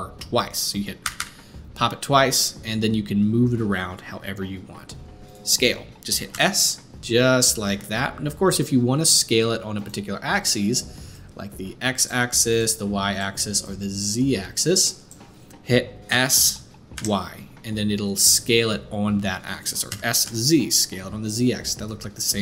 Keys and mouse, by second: 1.0 r, 6.3 s, 11.1-22.4 drag, 16.1 s, 19.9 s.